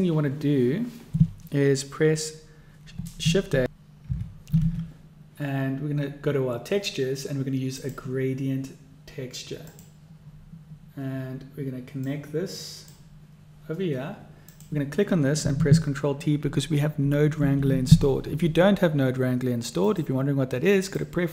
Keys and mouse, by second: 4.6 shift+a, 12.2-13.1 drag, 14.6-15.6 drag, 17.3 ctrl+t, 20.2-21.2 drag.